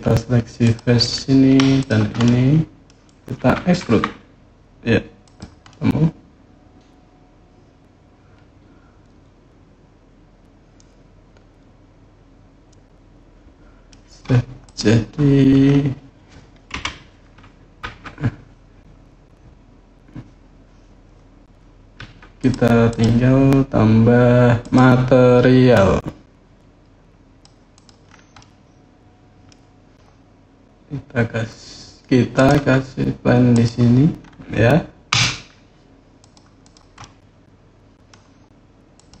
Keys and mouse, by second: 0.4 click, 2.0 middle click, 3.6 e, 5.0 click, 5.4-6.6 drag, 6.6-13.7 middle drag, 16.5 KP_1, 21.7 Tab, 22.2 click, 22.7 click, 24.4 click, 25.5-27.2 drag, 27.5 click, 28.1-29.3 middle drag, 32.2-33.8 drag, 34.9 s, 36.0 click, 36.4 click, 36.8-37.9 middle drag, 38.7 click.